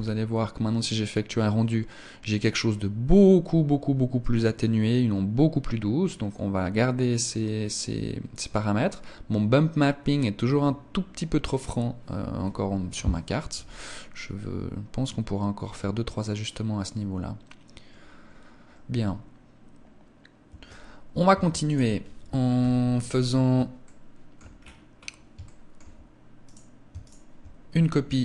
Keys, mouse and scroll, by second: 20.2 Escape, 21.0 ctrl+s, 22.3 KP_1, 23.6 shift+middle click, 24.4-25.4 scroll up 7, 25.2 shift+middle click, 26.3 right click, 26.8 shift+right click.